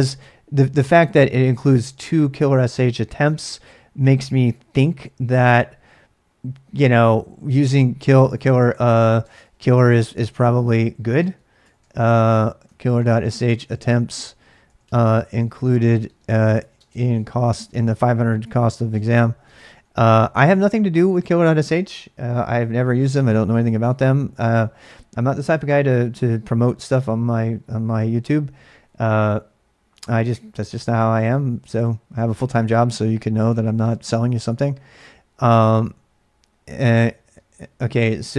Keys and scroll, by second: 4.7 ctrl+a, 4.9 ctrl+a, 9.0-10.0 typing, 11.2-20.8 typing.